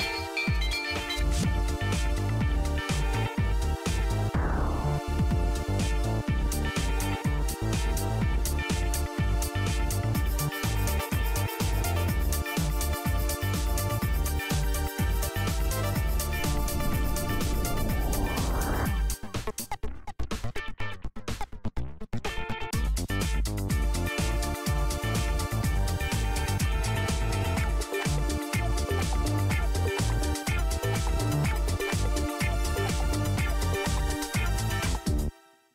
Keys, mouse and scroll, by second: 1.0 super+d, 1.4 typing, 2.4 Escape, 2.4-4.5 typing, 4.4 click, 4.9 click, 5.5 click, 5.8 click, 6.6 click, 7.0 click, 7.5 click, 7.8 click, 8.1 click, 8.4 click, 9.5 click, 10.0 click, 10.4-14.0 typing, 12.0 scroll up 1, 12.2 scroll down 1, 15.9 Return.